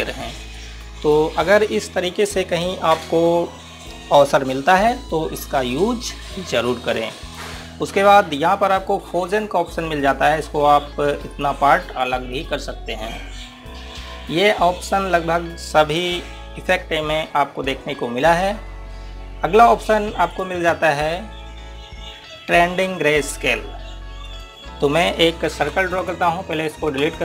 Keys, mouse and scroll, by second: 10.9 click, 21.0 click, 25.0 click.